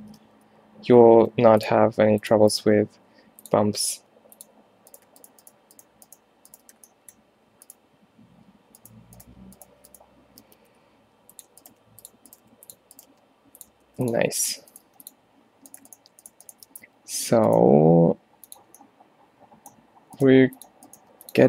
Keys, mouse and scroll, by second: 0.3 f, 1.4 ctrl+r, 2.7 g, 4.0 g, 6.8 f, 10.5 g, 11.7 g, 12.5 g, 13.2 g, 13.9 ctrl+r, 14.9 g, 16.8 f, 17.7 g, 20.5 g, 21.1 g.